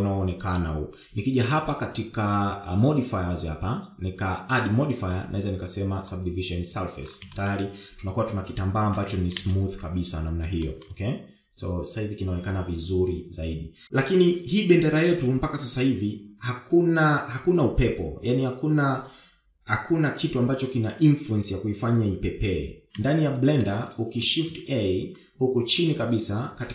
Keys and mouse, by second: 2.4 click, 5.1-7.3 drag, 8.1 shift+middle click, 9.7 shift+Left, 10.2 space, 11.5 shift+middle click, 24.3 space, 25.2 shift+a.